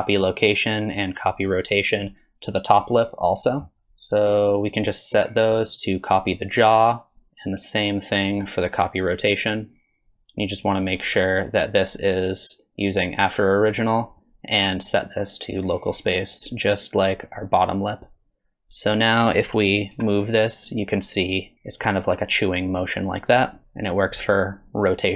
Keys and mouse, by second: 1.0 click, 3.8 click, 5.4-6.7 drag, 7.3-8.3 drag, 9.2 click, 11.9-13.5 drag, 14.8-15.9 drag, 16.4-17.3 drag, 18.7 click, 19.9 g, 23.6 r.